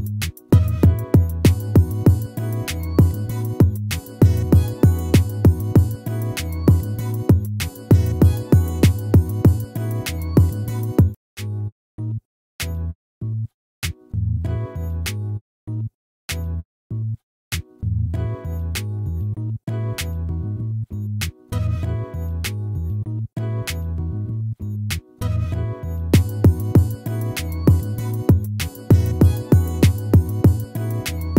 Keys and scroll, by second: 5.2 ctrl+z, 30.1 ctrl+z.